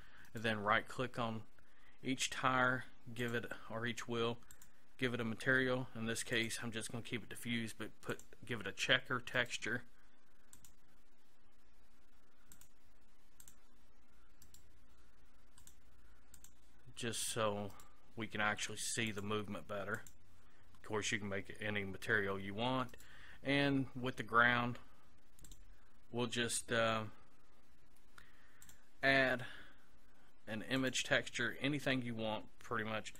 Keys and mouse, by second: 0.3-3.2 right drag, 3.2-9.4 drag, 9.4-10.6 right drag, 10.6-12.6 middle drag, 12.6-14.5 drag, 14.5-15.6 right drag, 17.7-19.1 right drag, 22.9-25.5 right drag, 25.5-28.7 drag.